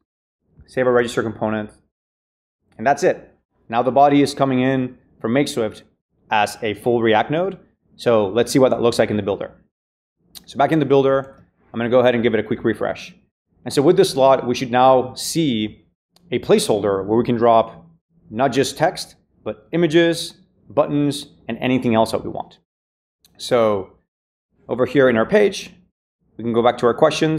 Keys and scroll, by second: 0.9 super+s, 11.1 super+r.